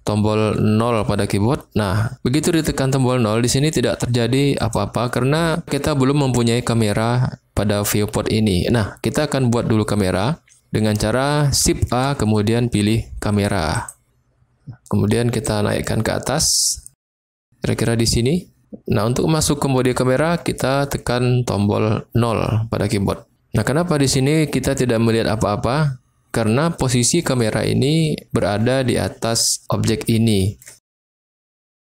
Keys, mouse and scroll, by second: 4.6 click, 11.9 shift+a, 15.5-17.7 drag, 22.1 KP_0, 26.7 click, 28.0-28.4 middle drag, 29.0 click, 29.6 shift+click, 29.8-30.3 shift+middle drag, 30.3 shift+click.